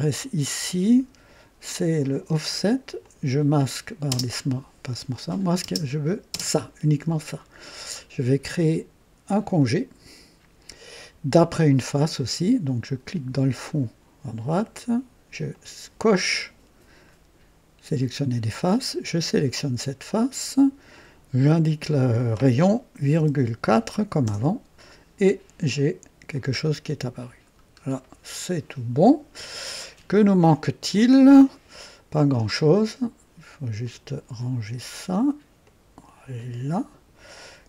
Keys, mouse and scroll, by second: 0.1 click, 1.9 click, 3.0 click, 4.1 space, 5.1 click, 5.6 space, 6.2 space, 9.5 click, 13.3 click, 15.4 click, 19.0 click, 20.9 click, 23.1-24.2 typing, 24.2 KP_Enter, 26.3 click, 27.4-28.0 scroll down 1, 28.4-29.2 right drag, 30.4 right click, 33.8 click, 35.6-37.2 drag.